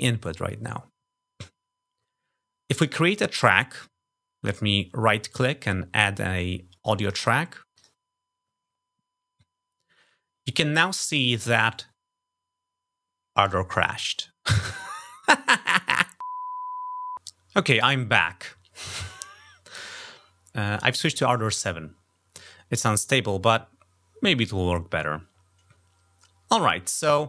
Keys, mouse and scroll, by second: 4.4 right click, 6.1 click, 7.0 click, 7.7 click.